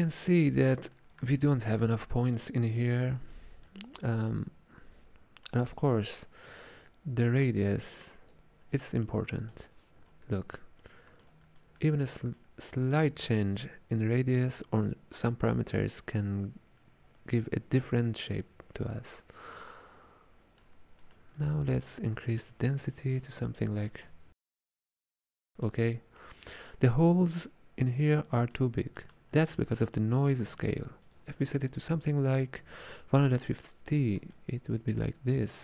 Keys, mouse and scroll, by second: 5.7-8.8 drag, 10.6-19.1 middle drag, 21.1-22.2 middle drag, 22.2 scroll up 4, 22.8-25.1 drag, 25.1-29.4 ctrl+middle drag, 29.4 scroll down 5, 29.7 middle click, 30.5-31.1 scroll up 4, 31.1-34.1 drag, 34.4-35.6 middle drag.